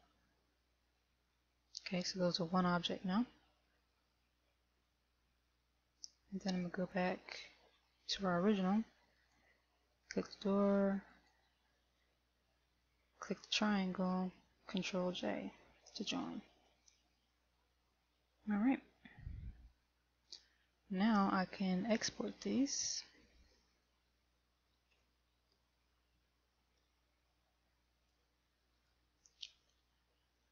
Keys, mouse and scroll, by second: 4.9 KP_1, 7.1 click, 8.1 middle click, 9.8 right click, 11.7 shift+right click, 16.1 ctrl+j, 20.1 KP_1, 20.8-21.1 scroll down 2, 26.1 shift+middle click, 27.3 scroll up 1, 28.3 right click, 29.1 right click.